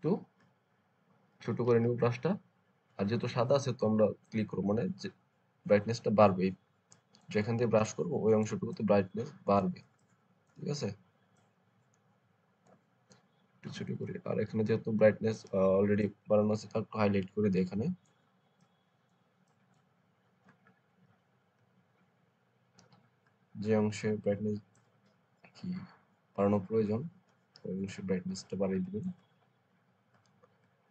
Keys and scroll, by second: 1.5 [, 7.7 space, 13.6-15.1 typing.